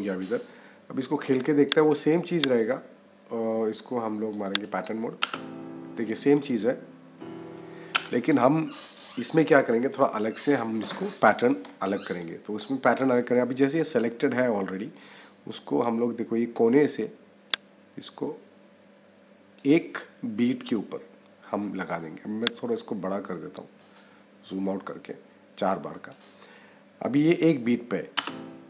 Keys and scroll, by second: 5.1 -, 28.0 -.